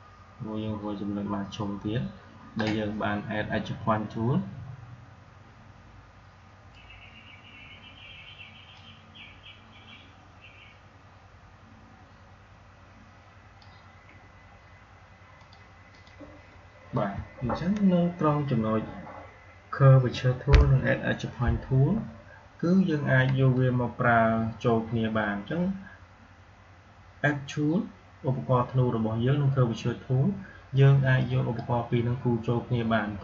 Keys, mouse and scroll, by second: 8.6-15.2 drag, 31.0-33.2 drag.